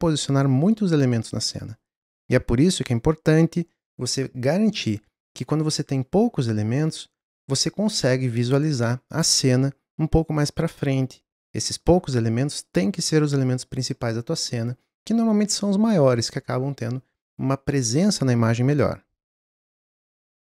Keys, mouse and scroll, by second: 19.6 click, 19.7 scroll up 3, 19.9-20.2 middle drag, 20.2 scroll down 1, 20.4 scroll up 1.